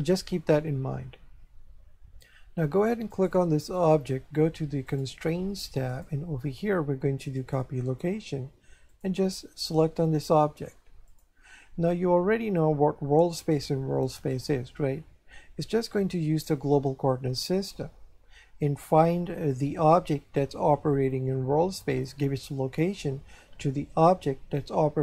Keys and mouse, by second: 3.1 right click, 4.9 click, 7.4 click, 8.9 click, 11.1 click.